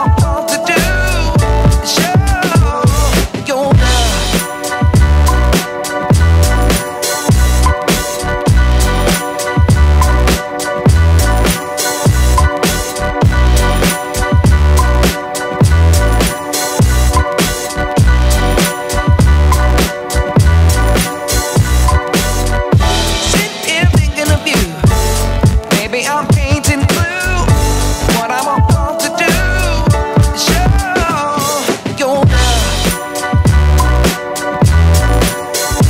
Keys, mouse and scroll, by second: 0.0 middle click, 1.4 alt+middle click, 1.6-2.9 alt+drag, 3.1-3.5 alt+middle drag, 3.6 alt+drag, 4.1-4.4 alt+middle drag, 4.6-4.9 alt+drag, 5.2 alt+click, 5.5 alt+middle click, 6.6-8.6 drag, 9.1-10.8 alt+middle drag, 12.0 alt+middle drag, 12.5-14.0 alt+middle drag, 14.3 alt+middle click, 14.6-14.9 alt+drag, 15.2-17.0 alt+drag, 17.9 ctrl+s, 18.7 alt+click, 19.1-20.0 alt+drag, 20.5 alt+click, 21.1 click, 25.4 click, 25.9 alt+drag, 26.2-26.6 alt+drag, 27.6 ctrl+s, 28.0 click, 28.3 alt+click, 28.9 shift+a, 29.3 s, 30.0 alt+click, 30.3 shift+a, 31.3 ctrl+space, 33.0 ctrl+alt+KP_0, 33.5 click, 35.0 Tab, 35.2 click, 35.7 click.